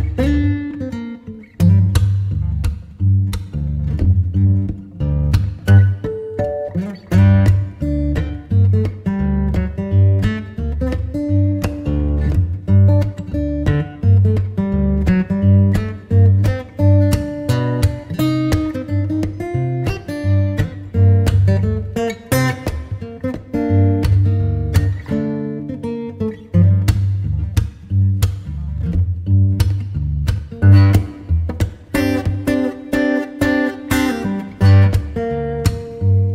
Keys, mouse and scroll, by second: 0.3 Return, 1.0-1.9 typing, 3.7 KP_Enter, 4.2 KP_Enter, 6.4 click, 12.4 click, 14.6 t, 16.7 t, 17.1 click, 18.8 x, 23.0 shift+a, 27.3 click.